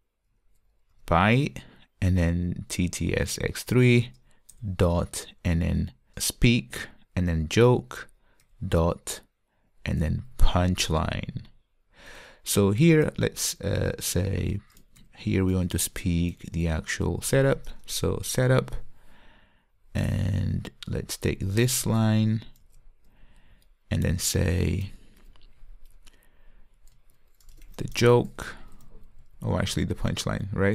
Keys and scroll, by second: 4.2 Return, 6.2 Return, 10.5 Return, 14.0 Return, 15.8 Return, 22.7 super+c, 30.0 alt+BackSpace.